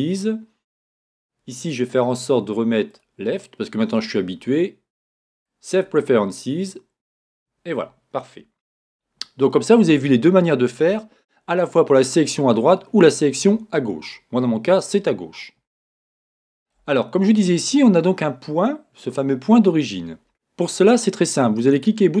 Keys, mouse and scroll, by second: 8.8-22.2 middle drag.